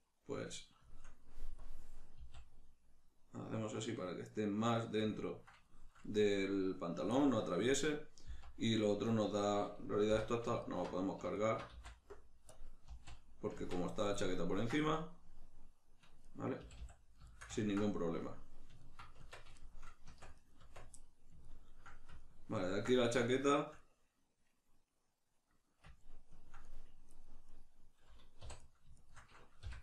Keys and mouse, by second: 1.6 click, 2.2 s, 5.1 click, 5.3-10.6 ctrl+middle drag, 8.3 z, 10.1 3, 10.6 alt+right click, 11.4 alt+right click, 11.7 x, 14.2-20.4 ctrl+middle drag, 16.6 a, 19.2 Tab, 20.1 Tab, 20.4 right click, 20.6 Tab, 21.0-27.4 middle drag, 27.4 right click, 28.4 2, 28.6 right click, 29.0 shift+right click, 29.6 f.